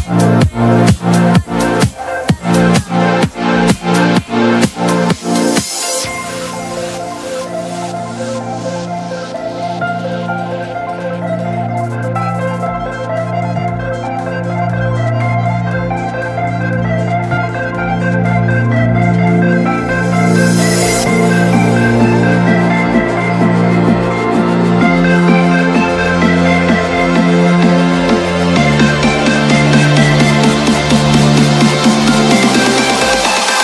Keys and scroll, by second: 0.5 alt+c, 0.6 alt+w, 0.9 p, 1.8 F4, 4.3 shift+F2, 4.5 F3, 6.2 ctrl+g, 7.0 e, 7.3 Escape, 8.3 shift+Page_Down, 8.6 shift+F2, 9.8 alt+c, 9.9 alt+w, 10.2 p, 11.3 F4, 11.9 Escape, 15.8 shift+F2, 16.1 F3, 18.5 space, 20.6 c, 20.9 Escape, 24.1 ctrl+r, 24.7 Escape, 25.4 shift+F2, 26.7 g.